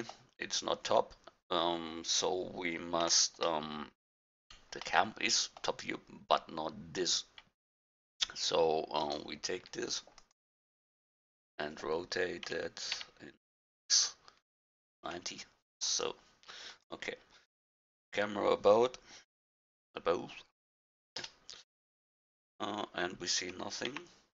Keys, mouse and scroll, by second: 3.0 n, 7.8-9.0 middle drag, 9.0-10.6 drag, 12.4 r, 16.8-20.8 drag, 21.2 KP_0, 23.9-24.3 middle drag, 23.9 g.